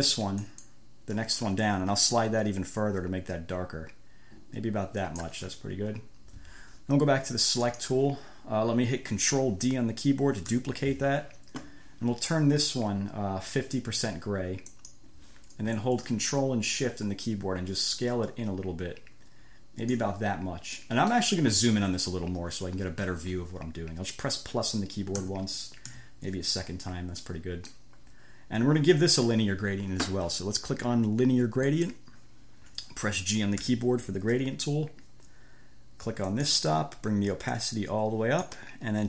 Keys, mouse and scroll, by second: 0.6 click, 2.4-5.7 drag, 7.9 click, 10.8 ctrl+d, 15.0 click, 17.5-20.4 ctrl+shift+drag, 21.0 click, 25.4 =, 26.2 =, 27.5 click, 32.0 click, 33.9 g, 36.6 click, 37.8-38.9 drag.